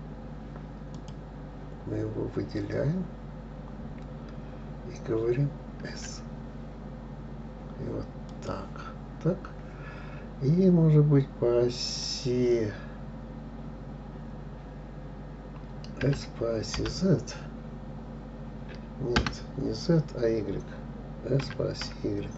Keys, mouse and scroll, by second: 1.4 click, 6.3 s, 9.4-10.4 scroll down 1, 10.4-12.3 scroll down 1, 12.3 click, 16.4 s, 21.8 s.